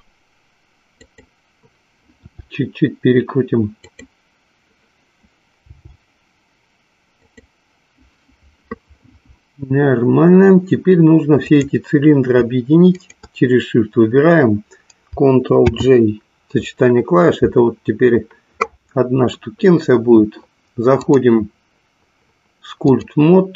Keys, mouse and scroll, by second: 1.1 click, 2.4 r, 4.0 click, 5.9 g, 7.4 click, 11.4 click, 13.3 shift+click, 15.6 ctrl+j, 20.9-23.3 drag.